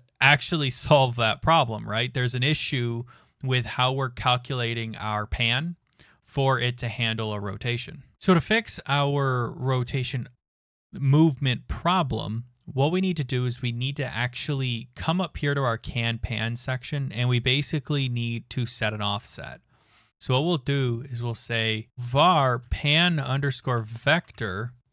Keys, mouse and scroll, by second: 8.2 click, 9.9 click, 14.3 click, 15.0 Return, 21.6-24.9 typing.